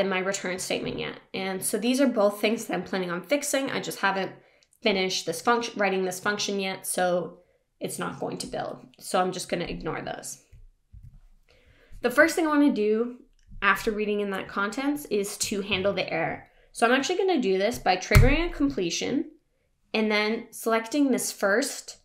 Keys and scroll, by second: 10.9 Down, 18.2 ctrl+space.